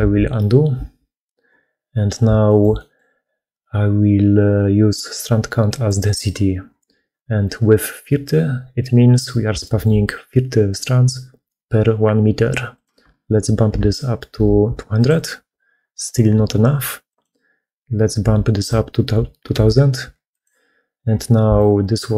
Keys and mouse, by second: 0.0 ctrl+z, 0.8 ctrl+z, 2.3 shift+click, 2.6 click, 5.6 click, 9.4 shift+middle click, 12.6-14.9 drag, 14.6 0, 17.0-20.3 drag, 21.4 middle click.